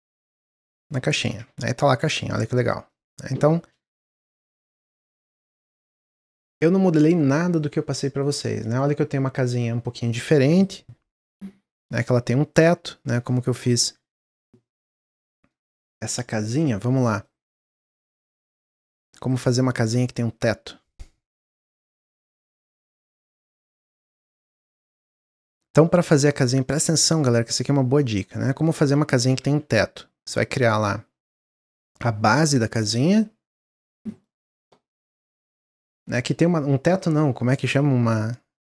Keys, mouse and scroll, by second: 0.7 shift+click, 1.4 Tab, 1.6 middle click, 1.9 scroll down 1, 2.1-2.5 middle drag, 2.5 scroll down 3, 2.8-3.6 middle drag, 3.6 shift+d, 16.5-16.9 scroll down 1, 16.9-17.8 middle drag, 17.8 shift+a, 19.4 s, 20.8-21.6 drag, 22.5-24.5 drag, 24.5-26.6 shift+middle drag, 26.6 click, 28.5 middle click, 29.2 g, 30.5 middle click, 31.2 click, 33.0-37.5 middle drag.